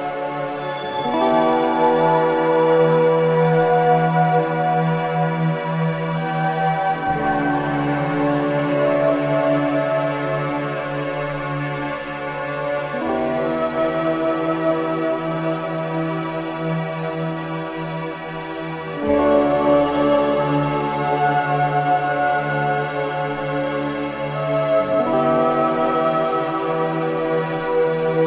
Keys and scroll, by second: 14.7 shift+F2, 15.3 Escape, 15.7 F3, 16.2 Escape, 21.2 ctrl+u, 21.7 Escape, 23.5 space, 28.0 space.